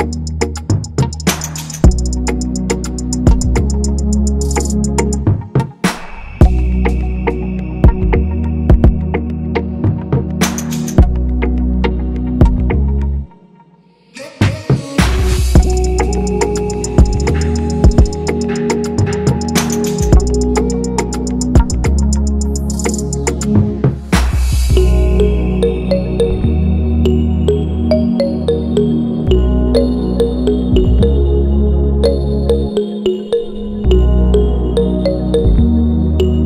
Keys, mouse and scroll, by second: 0.9 ctrl+c, 1.3 ctrl+f, 2.3 ctrl+i, 2.4 shift+click, 6.2 Return, 8.7 ctrl+=, 9.0 ctrl+=, 22.6 ctrl+-, 22.8 ctrl+-, 22.9 ctrl+-, 23.4 ctrl+=, 29.2 right click, 34.1 Left, 35.4 6.